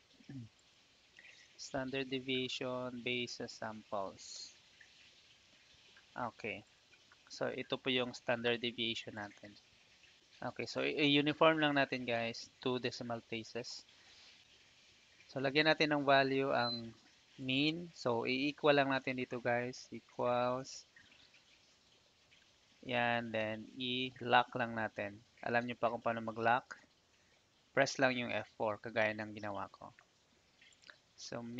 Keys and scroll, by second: 2.4 ctrl+shift+Down, 3.2 shift+Down, 4.3 Return, 19.7 =, 26.2 F4, 29.0 Return.